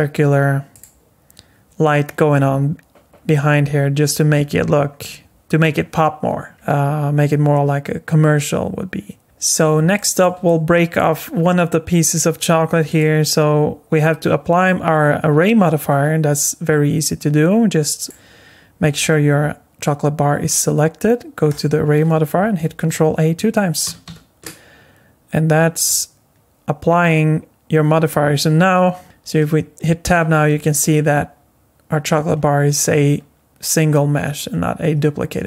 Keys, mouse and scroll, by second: 3.1-3.8 scroll up 3, 3.8 scroll down 2, 4.3-5.4 scroll up 3, 5.4-6.5 scroll down 2, 5.7-6.5 scroll up 1, 6.5-7.3 scroll down 3, 7.3 scroll up 4, 9.2 shift+middle click, 9.2-9.7 scroll up 4, 9.9 shift+middle click, 10.5 middle click, 12.9 click, 18.0 click, 21.5 click, 23.8 ctrl+a, 24.1 ctrl+a, 29.0 Tab, 30.0 Tab.